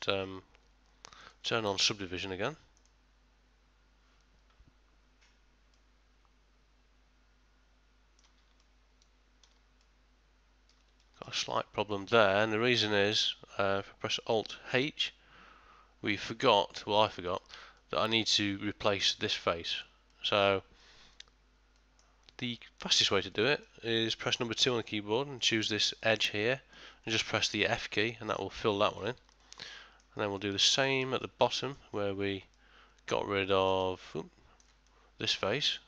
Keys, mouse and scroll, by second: 22.3 click.